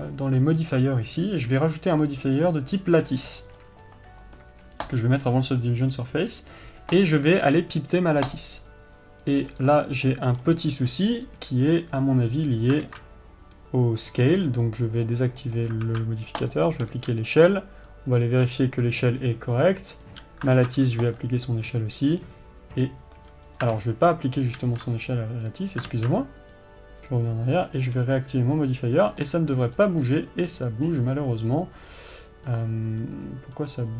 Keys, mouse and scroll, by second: 4.0-7.7 drag, 9.9 scroll down 1, 10.1-15.4 middle drag, 10.8-11.3 scroll up 1, 15.4 click, 15.8-20.1 middle drag, 16.9 ctrl+a, 17.3 n, 20.1 click, 21.5 ctrl+a, 22.2 click, 24.8 ctrl+z, 27.5 click, 28.7 click, 29.5 scroll down 1, 29.6-32.7 middle drag, 30.2-30.6 scroll up 1, 32.7-33.9 drag.